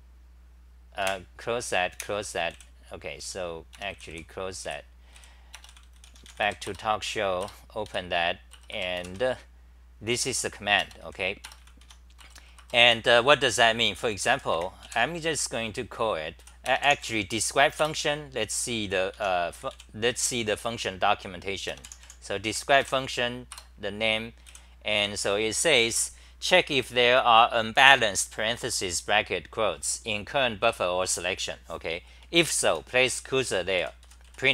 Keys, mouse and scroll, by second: 1.2 super+w, 2.5 super+w, 4.1 Delete, 4.7 w, 6.7 Return, 7.4 Return, 7.9 3, 8.5 Return, 8.8 Return, 9.0 k, 11.8 Home, 12.2 Return, 12.4 Return, 12.6 Return, 12.9-15.3 typing, 16.4 g, 17.8 Return, 19.2 Home, 19.3-20.2 typing, 22.5 End, 22.8 k, 23.7 Return, 24.5 w, 25.0 3, 32.7-34.5 typing.